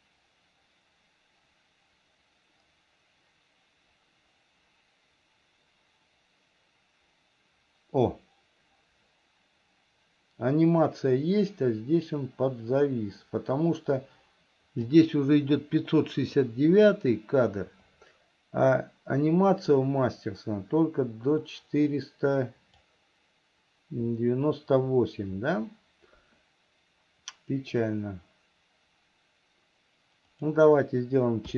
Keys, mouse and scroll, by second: 18.3-23.3 drag, 30.5-31.5 drag.